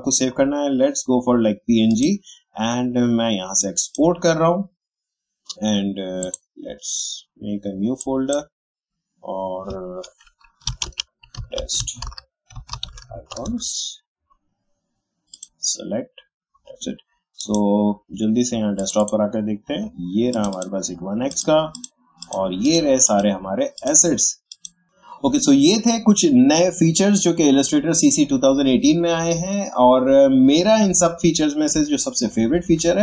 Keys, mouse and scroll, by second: 1.9-10.7 drag, 10.6 t, 11.7 space, 12.0 i, 13.4 Return, 15.3 click.